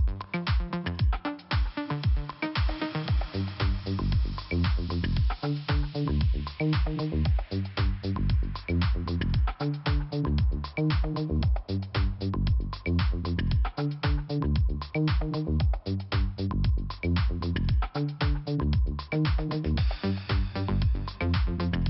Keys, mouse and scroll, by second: 0.8 click, 2.8 right click, 2.9 right click, 5.0 click, 5.9 click, 6.0 click, 6.4 right click, 6.5 right click, 7.0 click, 8.2 click, 11.2 click, 13.7 click, 18.8-19.3 scroll down 1, 19.4 click, 20.9 click.